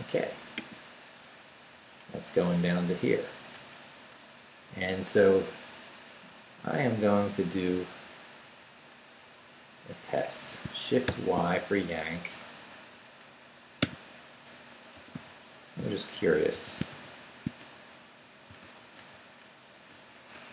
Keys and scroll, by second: 7.1 Up, 7.7 Up, 8.2 Up, 9.2 Right, 11.1 shift+y, 11.8 shift+Down, 12.4 Down, 13.8-18.5 typing, 19.0 super+v, 20.3 super+Escape.